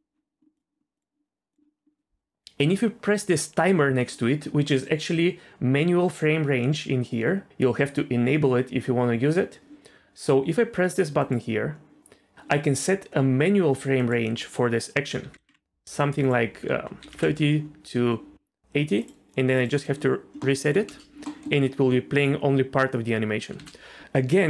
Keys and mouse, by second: 0.9 click, 4.8-9.7 drag, 11.2 click, 14.0-15.5 drag, 16.2 click, 19.5-20.4 drag, 20.4 middle click, 20.9 space, 21.2 middle click, 23.5 space.